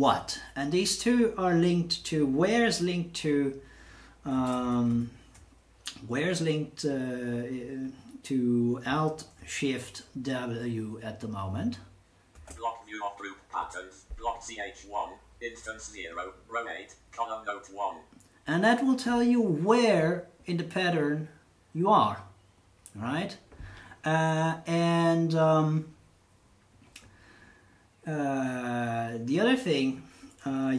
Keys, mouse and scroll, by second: 4.5 ctrl+Tab, 4.9 ctrl+Tab, 12.3 alt+shift+w.